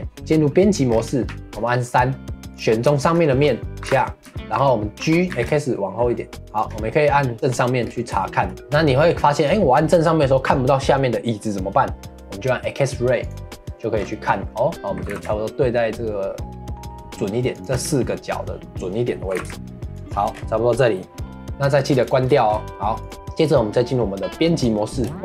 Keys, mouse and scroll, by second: 0.0 Tab, 0.5 middle click, 0.9-1.2 scroll down 1, 1.2 3, 1.3 middle click, 1.5-2.5 scroll up 1, 2.5 click, 3.0 shift+middle click, 3.8 g, 4.3 middle click, 4.5-5.0 scroll down 1, 5.0 g, 7.3 click, 7.8-8.2 scroll up 1, 8.2-10.7 shift+middle drag, 13.2 click, 13.9-15.0 scroll up 2, 15.0 g, 20.3-20.9 scroll down 1, 20.9-22.0 shift+middle drag, 22.0 click, 22.3-23.0 shift+middle drag, 23.0 click, 25.1 shift+middle click.